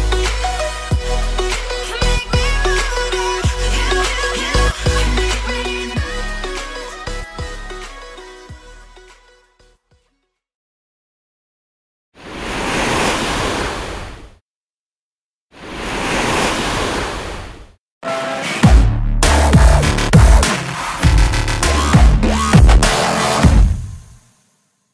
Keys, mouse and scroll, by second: 0.5 scroll down 9, 0.6 shift+middle click, 3.4 scroll down 1, 3.5 middle click, 5.8 shift+scroll down 1, 6.0-6.7 scroll up 9, 6.7 scroll down 1, 6.7 middle click, 9.2 shift+scroll down 2.